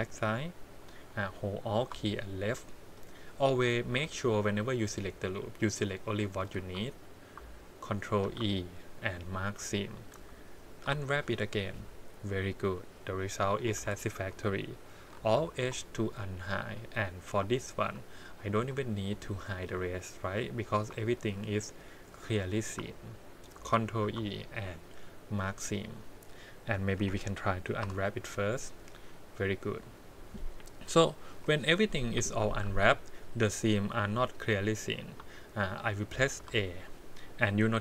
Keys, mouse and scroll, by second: 0.0 click, 0.6 click, 1.6 alt+click, 2.5 middle click, 3.8 shift+z, 4.0 middle click, 6.6 shift+z, 8.2 ctrl+e, 10.1 a, 10.8 u, 13.7 alt+a, 15.3 alt+h, 16.1 click, 17.5 shift+middle click, 18.5 2, 20.5 click, 21.1 shift+click, 22.0 click, 22.5 click, 24.0 ctrl+e, 25.8 click, 27.0 l, 27.8 u, 30.0-30.3 scroll down 2, 31.2 KP_1, 32.6 alt+a, 33.1 middle click, 35.3 shift+middle click, 36.3 a.